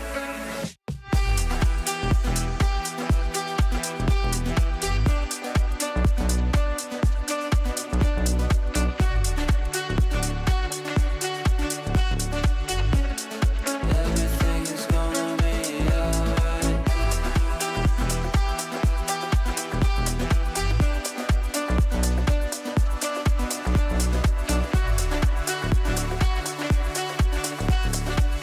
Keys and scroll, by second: 9.3 Up, 16.6 shift+F2, 17.1 Escape.